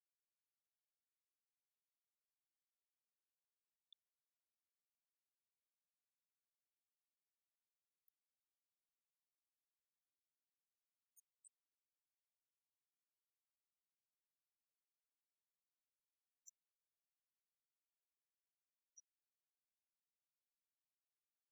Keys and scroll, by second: 16.4 ctrl+Up, 17.2 ctrl+Left.